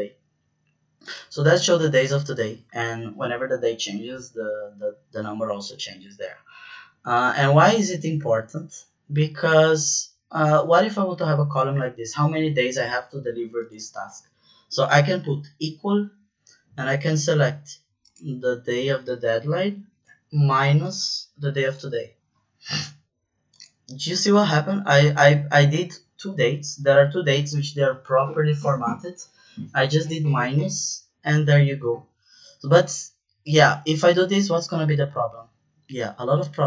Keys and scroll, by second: 14.8 =, 19.9 -, 21.6 Return.